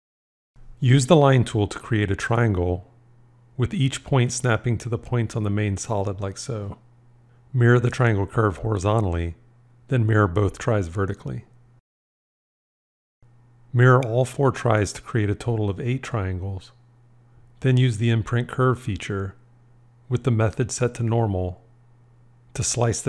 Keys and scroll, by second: 8.8 alt+x, 10.9 alt+x, 19.6 shift+i.